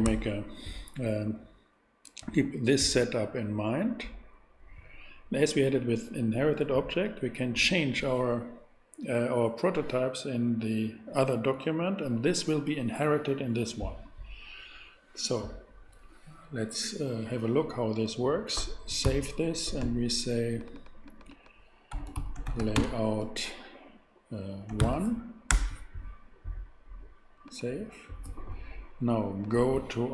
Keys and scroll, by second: 0.0 super+Tab, 19.0 super+s, 21.9-22.7 typing, 24.7 o, 24.8 n, 25.5 Return.